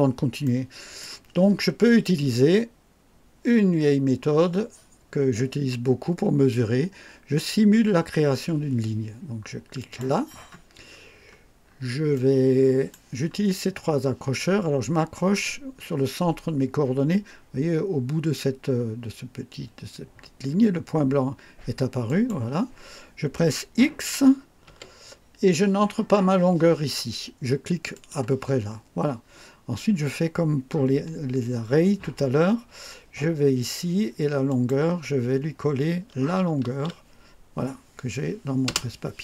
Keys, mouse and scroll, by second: 0.3-1.1 right drag, 9.7 click, 10.8-11.8 scroll up 2, 12.0 right click, 22.0 click, 24.6 x, 27.8 click, 34.4 click, 36.5 ctrl+v, 38.6 Return.